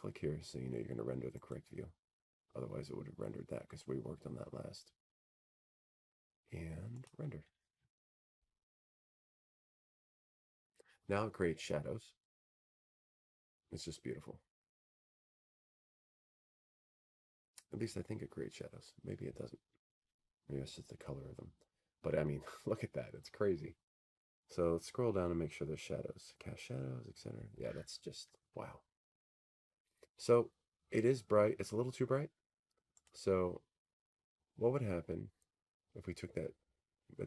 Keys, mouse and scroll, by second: 3.8-6.1 drag, 7.2-9.2 right drag, 12.7 click, 29.7-30.8 scroll, 30.8-32.9 scroll, 33.1 middle click.